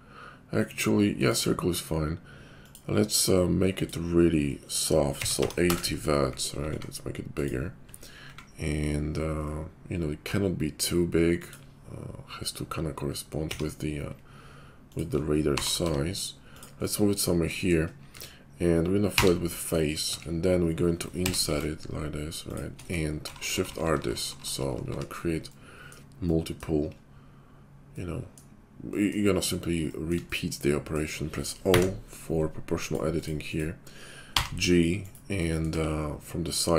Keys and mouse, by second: 2.7-7.5 middle drag, 6.6 s, 7.5-19.1 drag, 8.2 s, 13.4 r, 15.5 g, 18.1 Tab, 19.1 f, 20.0 Tab, 21.2 i, 23.2-24.8 typing, 24.0-35.1 shift+drag, 31.5 0, 32.7 middle click, 32.7 right click, 33.1 right click, 33.4 right click, 34.3 g, 35.1-36.7 middle drag, 35.7 `.